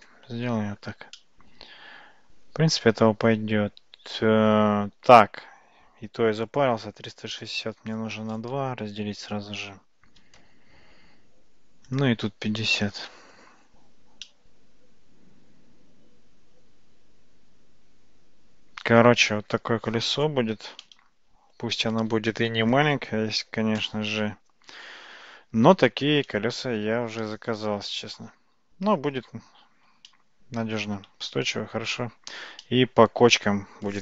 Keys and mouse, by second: 0.0 KP_0, 1.3-4.6 middle drag, 6.5-11.3 drag, 8.4 BackSpace, 11.9-14.0 drag, 14.3-19.0 middle drag, 27.3-28.2 shift+middle drag, 30.2-31.1 shift+middle drag, 32.7-33.3 shift+middle drag.